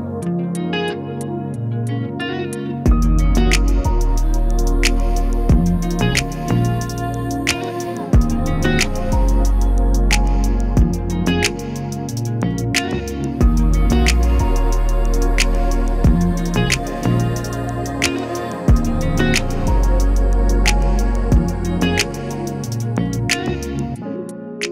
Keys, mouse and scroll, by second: 2.7 click, 10.9 click, 12.9 click, 18.2 click, 24.2 click, 24.2-24.7 typing.